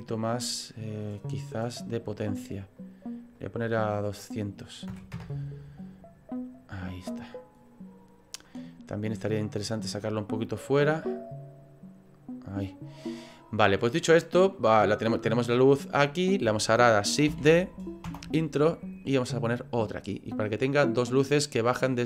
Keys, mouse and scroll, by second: 3.4 click, 9.3 click, 12.0 click, 14.1 click, 14.5 middle click, 17.3 shift+d, 19.2 click, 21.7 middle click.